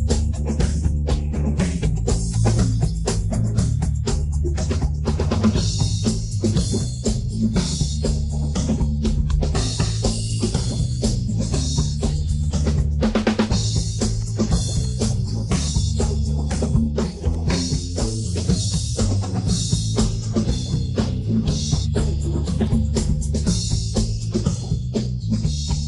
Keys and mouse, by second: 0.7 middle click, 1.5 click, 2.8 ctrl+z, 3.2 middle click, 3.9 Tab, 4.1 middle click, 4.5-5.0 middle drag, 5.3-5.8 middle drag, 6.0 middle drag, 6.8 KP_1, 7.6 KP_3, 8.9 shift+middle drag, 9.8 click, 10.7-11.3 middle drag, 11.9-13.2 middle drag, 14.8-15.5 drag, 15.7-16.7 middle drag, 17.3 click, 18.2-18.6 middle drag, 18.8-20.4 middle drag, 20.7 middle click, 21.0 middle click, 21.4 middle click, 22.1 middle drag, 22.6 click, 23.3 shift+middle click, 23.9 shift+middle drag, 24.3 click, 24.6 middle click, 25.2-25.8 middle drag.